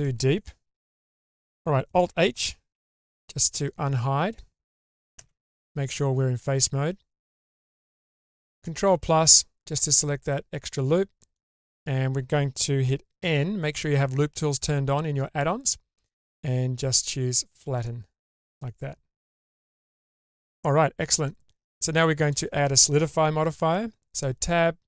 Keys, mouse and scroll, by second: 0.9-1.3 middle drag, 1.4 scroll down 1, 2.9 alt+g, 2.9 alt+h, 3.7 scroll up 3, 5.2 3, 8.5 ctrl+KP_Add, 10.0-11.3 ctrl+middle drag, 13.2 n, 17.7 click, 19.7-21.3 middle drag, 22.2 click, 23.6 Tab.